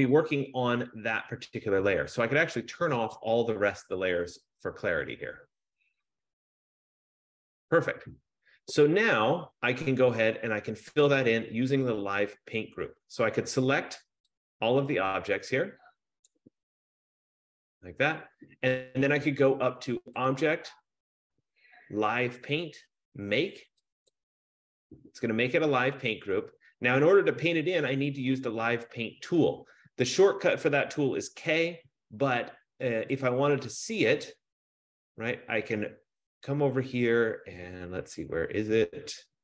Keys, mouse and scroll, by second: 0.3 click, 3.3 click, 5.2 click, 10.1 click, 16.5-17.8 drag, 21.3 click, 24.5 click, 30.8 F15, 33.6 click, 37.6-39.0 scroll, 39.3-39.4 scroll up 9.